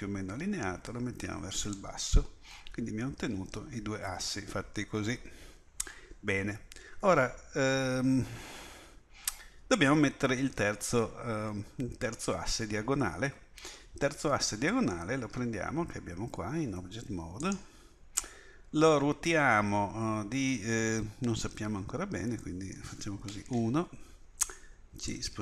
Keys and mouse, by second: 16.8 Tab, 23.5 KP_1.